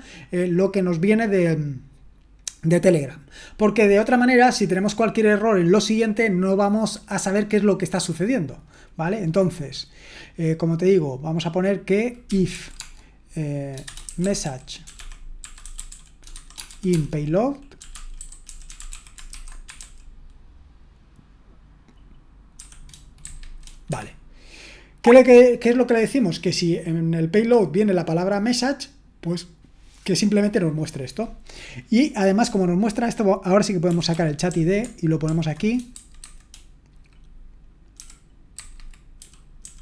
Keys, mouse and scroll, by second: 13.5-20.3 typing, 23.6-24.4 typing, 35.2-36.2 typing, 39.2-39.6 typing.